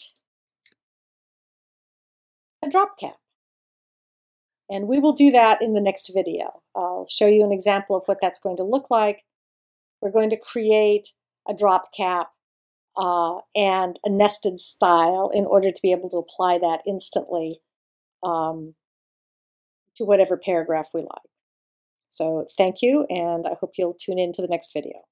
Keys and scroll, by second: 1.8 alt+shift+super+0.